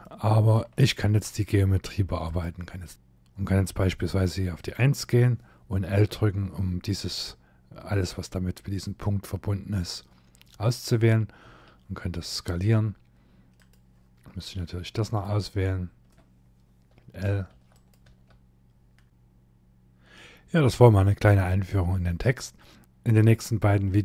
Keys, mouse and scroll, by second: 0.2 shift+scroll down 1, 0.4 middle click, 1.1 scroll up 4, 1.9 click, 4.2 click, 5.6 l, 14.7 shift+click, 16.7 l, 17.2 l, 17.4 click, 17.7 l, 18.8 middle click.